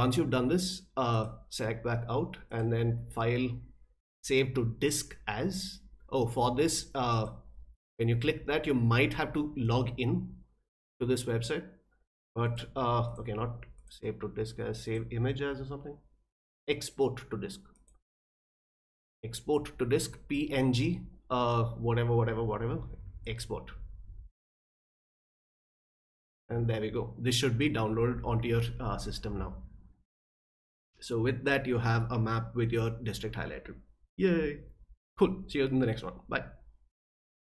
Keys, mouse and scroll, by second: 1.1 click, 2.5 click, 7.1 click, 12.4 click, 13.1 click, 13.8 click, 14.8 click, 17.7 click, 23.2 click, 37.3 click.